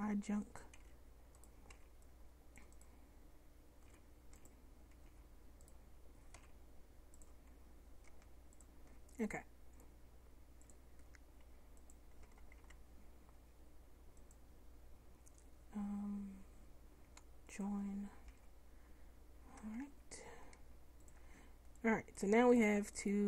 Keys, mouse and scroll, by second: 0.8 b, 1.8 c, 4.0 p, 5.2 Tab, 6.4 m, 12.3 a, 12.7 a, 18.4 Tab, 19.9 Tab, 22.6 middle click.